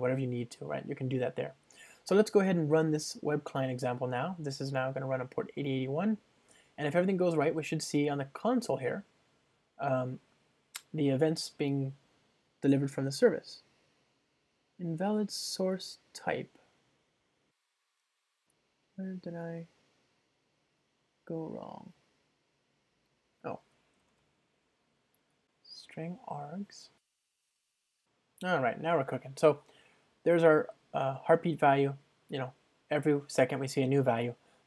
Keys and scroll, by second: 7.8 ctrl+shift+r, 24.2 super+p, 27.0 super+r, 27.4 ctrl+alt+shift+Right, 27.5 Return, 27.6 ctrl+r.